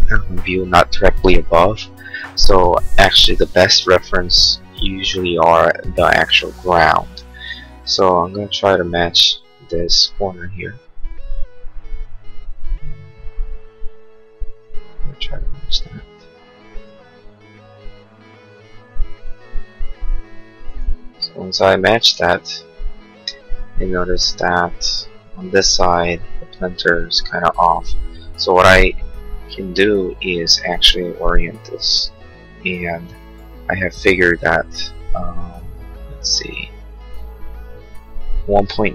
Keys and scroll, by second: 30.3 q.